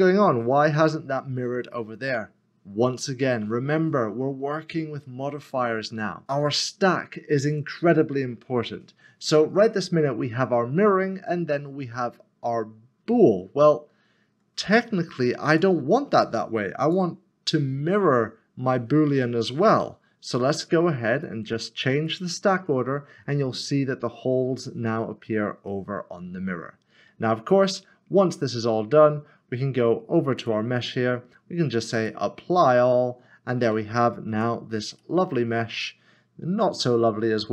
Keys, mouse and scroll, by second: 5.0 middle click, 6.2 click, 15.4 click, 21.2 click, 25.6 middle click, 26.9 middle click, 27.1 scroll down 1, 30.4-33.1 scroll down 1, 33.1 click, 34.3 click, 34.9 Tab, 35.8 middle click.